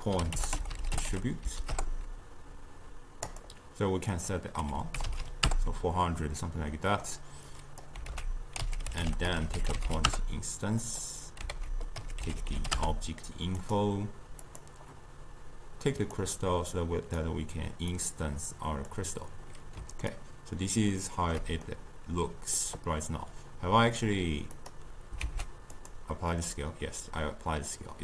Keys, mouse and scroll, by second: 4.1-5.2 drag, 5.2 0, 6.8 middle click, 7.5 click, 8.1 ctrl+a, 11.6 ctrl+a, 14.4 click, 16.8-20.1 drag, 20.1-24.6 ctrl+middle drag, 24.6 click, 25.2 ctrl+a.